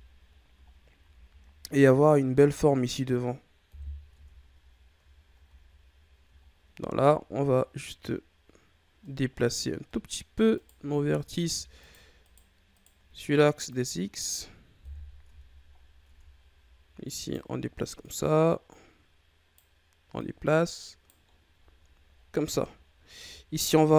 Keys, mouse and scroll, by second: 0.2-0.9 scroll down 4, 0.9 a, 1.6-2.0 scroll up 3, 2.0-3.6 middle drag, 3.6 KP_1, 4.1 Tab, 5.0-5.4 shift+scroll up 1, 5.4 a, 6.2-6.9 shift+scroll up 4, 7.0-8.6 scroll up 1, 8.8 scroll down 2, 9.0 middle click, 9.5-9.8 scroll up 1, 9.8 middle click, 10.5 right click, 10.9 middle click, 11.1-11.8 scroll up 1, 11.8 shift+right click, 12.2 shift+right click, 12.7 shift+right click, 13.6-14.7 drag, 14.7 KP_1, 15.2 Tab, 15.7 scroll down 1, 16.0 Tab, 17.0 right click, 17.9 right click, 20.1 right click, 21.2-22.1 scroll down 3, 22.2-22.7 shift+scroll down 8, 22.7-23.9 scroll up 12.